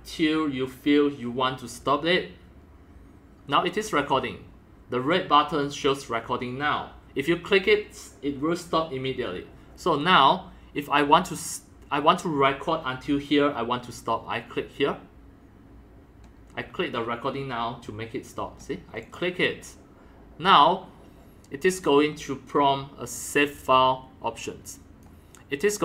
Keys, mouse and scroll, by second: 19.0 click, 19.1-24.2 drag, 24.4-25.0 drag, 25.0 click.